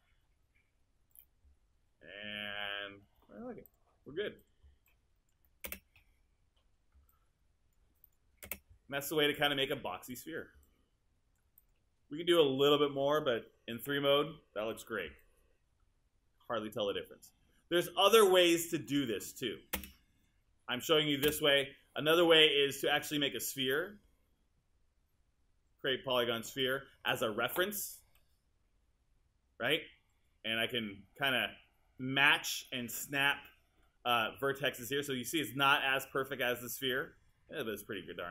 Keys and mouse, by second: 8.5 space, 13.8 KP_3, 19.8 space, 20.9 click, 29.7 click, 34.8 click.